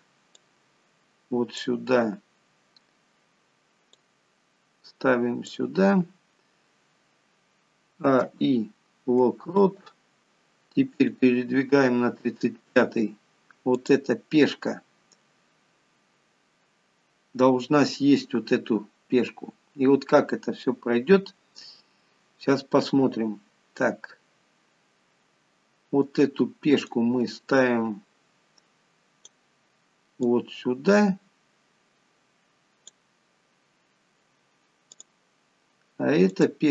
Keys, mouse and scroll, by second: 0.6 click, 4.3 click, 8.2 a, 8.5 i, 11.4 click, 14.0 click, 18.7-19.4 scroll up 3, 20.5-21.2 scroll down 1, 27.2 click, 30.6 click, 35.2 click.